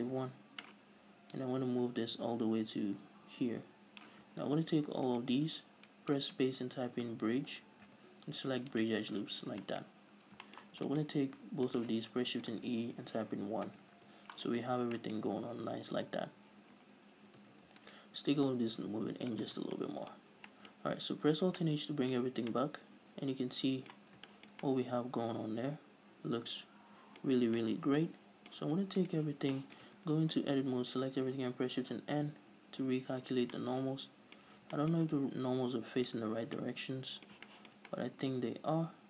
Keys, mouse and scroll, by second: 0.7 Return, 1.8-5.5 drag, 5.5 alt+shift+right click, 6.6 space, 9.8 scroll down 2, 10.1-11.3 shift+middle drag, 10.3-10.9 scroll up 2, 11.3 alt+right click, 12.1 alt+shift+right click, 12.9 shift+e, 14.2 Return, 14.4 Tab, 14.9-15.4 scroll down 2, 15.4 shift+middle click, 15.6-17.8 scroll up 2, 17.8 Tab, 18.1 middle click, 18.2 alt+right click, 18.9-20.2 drag, 19.9 scroll down 2, 20.0 Tab, 20.2-27.7 middle drag, 20.8 scroll down 2, 21.8 alt+h, 22.6 scroll up 2, 22.7 a, 27.7-28.0 scroll up 2, 28.0-29.4 middle drag, 29.4 right click, 29.8 scroll down 1, 30.0-39.0 shift+middle drag, 30.3 Tab, 30.4-31.1 scroll up 2, 31.1 a, 32.4 shift+n, 34.8 a, 35.4 Tab, 36.6 a, 36.9 scroll down 2.